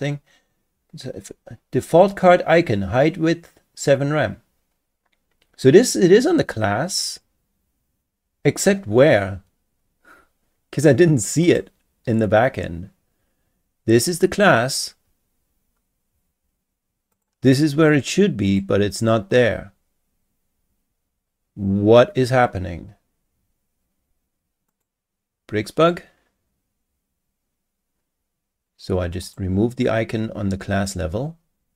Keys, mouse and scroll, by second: 11.4 click, 17.1 click, 17.9 click, 18.5 click, 19.0 click, 24.7 click, 29.2 click.